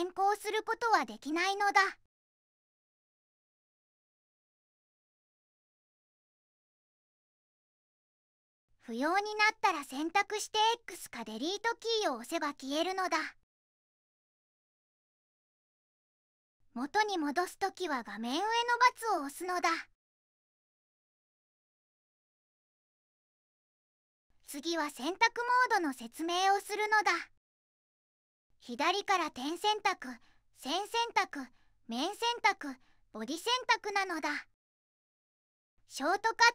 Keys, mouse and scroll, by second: 11.7 x, 20.2 middle click.